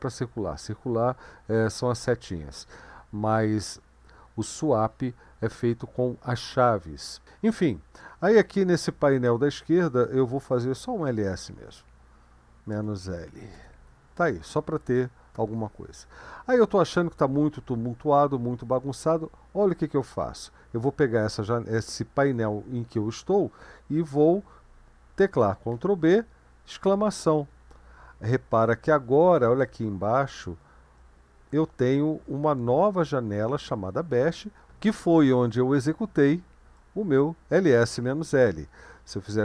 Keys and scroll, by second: 11.4-13.8 typing, 25.8 ctrl+b, 26.9 !.